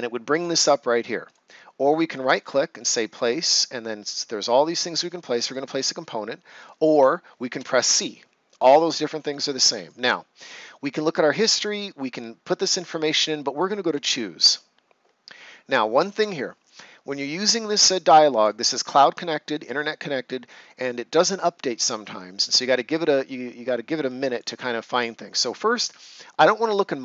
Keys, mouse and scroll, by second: 1.2 click, 1.7 right click, 5.4 click, 7.5 c, 13.8 click, 17.9 click, 24.2 click.